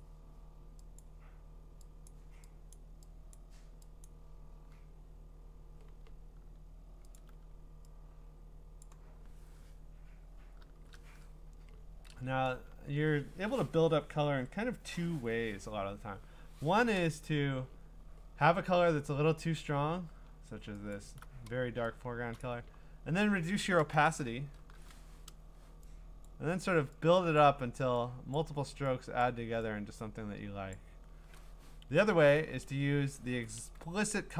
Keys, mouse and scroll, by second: 1.0 click, 2.1 click, 2.7 click, 3.3 click, 4.1 click, 7.1 alt+click, 8.8 click, 10.7 ), 12.6-13.6 scroll, 18.8 scroll, 20.9 alt+click, 22.4 click, 22.9 scroll, 24.6 %, 26.2 click, 27.4 click, 28.3 click, 29.2 click, 30.7 click, 31.9 ctrl+z, 32.1 ctrl+z, 32.4 ctrl+z, 32.6 ctrl+z, 33.6 ctrl+z.